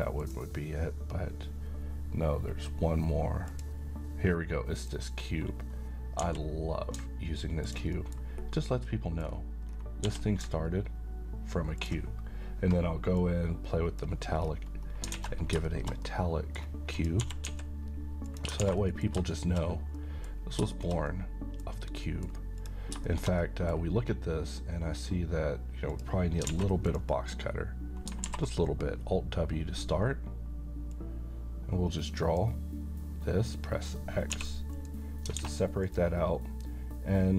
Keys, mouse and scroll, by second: 3.5 click, 6.2 g, 7.7 ctrl+click, 7.9 middle click, 9.3 scroll down 1, 10.0 g, 11.8 ctrl+click, 13.2-14.2 drag, 14.4 scroll down 1, 15.2 a, 15.4 scroll down 1, 15.7 middle click, 17.0 click, 17.2 typing, 18.3 click, 18.6 alt+a, 18.8 middle click, 19.3 shift+middle click, 19.8 scroll down 1, 20.0 middle click, 20.3 scroll up 1, 20.8-21.6 middle click, 21.7-22.0 scroll up 1, 22.0 middle click, 22.6 click, 23.1 shift+middle click, 25.9 click, 25.9 click, 26.5 alt+a, 26.8 click, 28.2 w, 30.9-32.5 drag, 34.3 x, 34.7 click, 35.4 alt+a, 35.8 click.